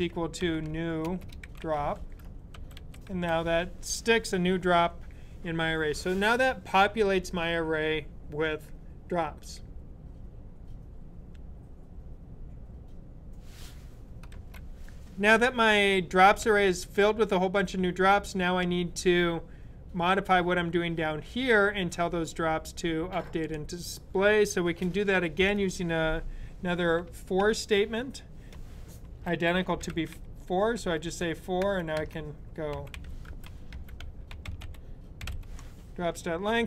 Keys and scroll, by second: 0.0-2.8 typing, 29.4-30.4 typing, 32.6-35.7 typing.